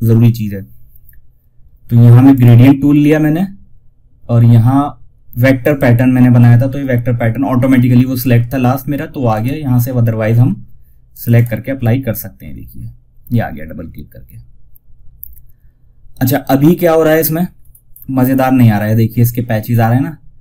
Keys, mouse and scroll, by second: 1.6 click, 1.6 typing, 4.9 click, 8.6 click, 16.9 scroll up 1.